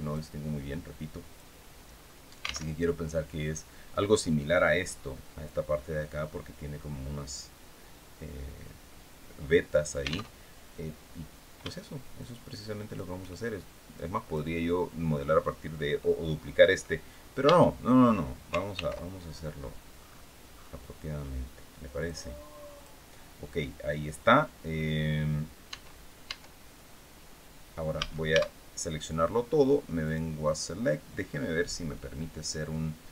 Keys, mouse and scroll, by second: 1.6-2.4 scroll up 2, 2.4 alt+Tab, 10.0 alt+Tab, 11.8-12.8 shift+drag, 13.6 click, 17.1 Tab, 18.4 ctrl+r, 19.6-20.0 scroll up 2, 20.2-20.6 scroll up 2, 20.9 scroll up 2, 21.7 click, 22.4 click, 25.4 Tab, 27.7 a, 29.7 click, 32.8 click.